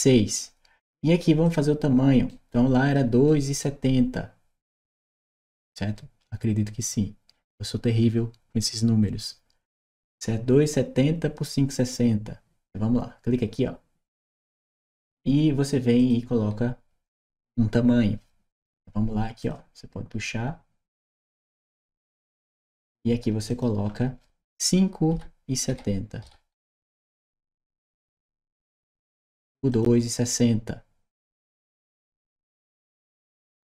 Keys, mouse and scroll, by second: 1.3 click, 2.1 right click, 3.1 right click, 15.8 click, 19.2 click, 21.0 click, 23.3 click, 26.8 Return, 29.5 click.